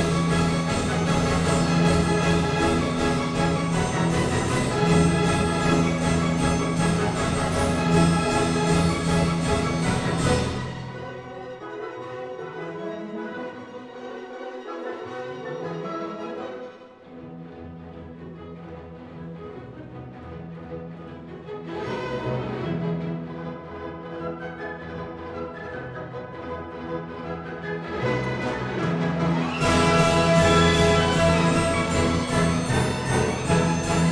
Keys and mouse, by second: 0.0 f, 2.8 ctrl+r, 5.2 click, 6.0 s, 6.2 z, 11.4 click, 12.1 3, 13.8 e, 14.2 right click, 14.7 s, 15.1 shift+z, 16.4 click, 19.1 Tab, 20.0 ctrl+2, 21.6 Tab, 22.8 ctrl+r, 24.3 click, 24.6 Tab, 25.0 right click, 27.1 Tab, 27.8 ctrl+r, 30.2 click, 30.3 Tab.